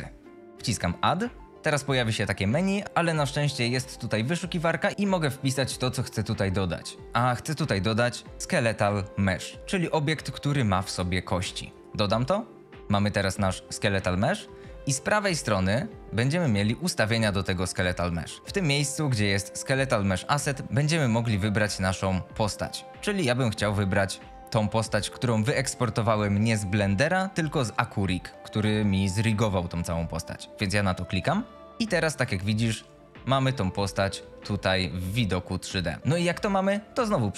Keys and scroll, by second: 15.1 F22, 32.4 F22, 32.8-34.9 typing.